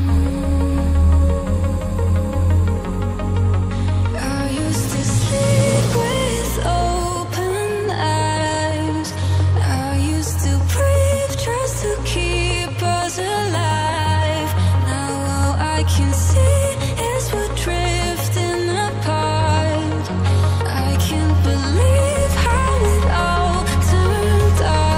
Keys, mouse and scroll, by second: 16.0 click, 16.1 double click, 16.5 click, 22.6 click, 22.7 double click, 24.5 click.